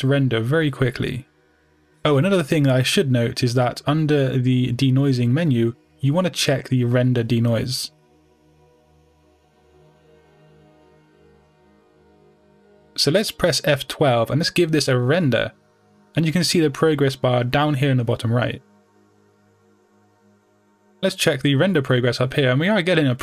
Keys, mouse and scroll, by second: 0.0 scroll up 1, 0.8-1.3 scroll down 2, 1.3 KP_0, 12.8-23.2 drag, 18.1 F12.